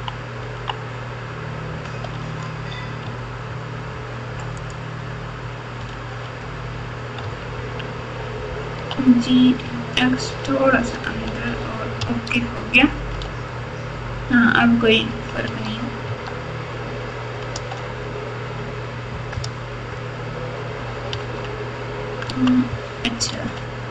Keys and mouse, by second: 3.0 Tab, 4.6 click, 5.9 alt+z, 7.2 Tab, 8.7 g, 12.0 Tab, 13.2 alt+z, 15.0 KP_6, 15.4 Tab, 16.0 Tab, 17.5 z, 18.8 Tab, 19.3 KP_Add, 19.8 KP_Add, 19.9 KP_Add, 21.1 Tab, 22.2 Tab, 23.3 alt+z.